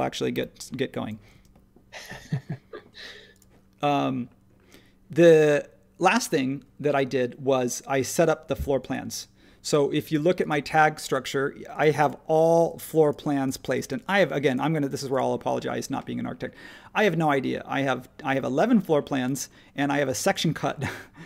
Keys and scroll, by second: 0.3 h, 1.3 space.